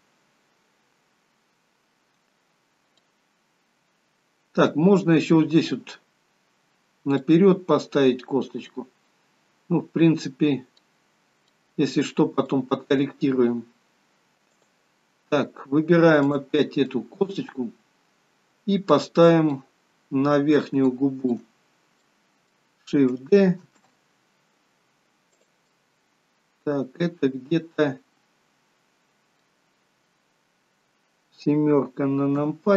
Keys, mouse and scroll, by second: 3.1 middle click, 7.3 middle click, 11.5 middle click, 12.4 z, 14.6 click, 15.2 scroll down 2, 16.3 click, 16.9 middle click, 20.9 shift+middle click, 21.6-22.2 scroll up 3, 22.1 middle click, 23.7 shift+d, 25.7 middle click, 32.4 KP_7.